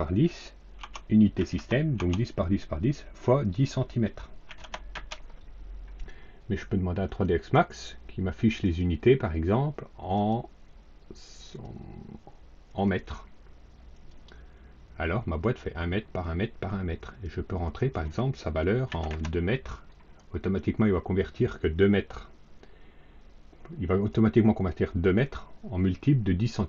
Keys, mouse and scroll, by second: 0.7 Tab, 1.3 KP_1, 1.4 KP_0, 1.8 Tab, 4.4 KP_1, 4.5 KP_0, 4.8 KP_Enter, 7.0 click, 8.5 click, 10.0 click, 11.4 click, 12.6 click, 13.8 click, 17.6 click, 18.8 KP_2, 19.0 KP_Enter.